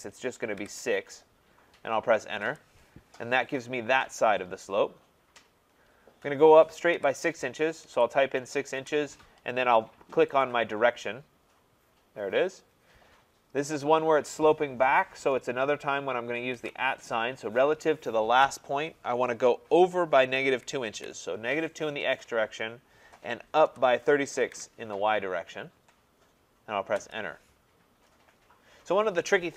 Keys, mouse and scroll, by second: 0.6 6, 2.4 Return, 6.9 6, 7.9 shift+', 8.8 Return, 10.4 click, 16.6 shift+2, 18.9 typing, 20.2-21.0 typing, 23.7-24.9 typing, 27.0 Return.